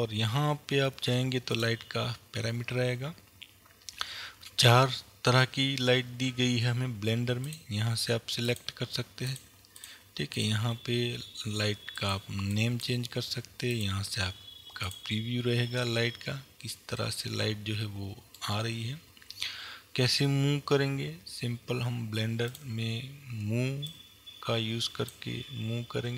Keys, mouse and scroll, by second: 1.6 click, 7.5-8.7 drag, 9.3 click, 10.4-13.8 drag, 15.4 click, 17.0-21.0 middle drag, 22.6 click, 23.9-26.1 drag.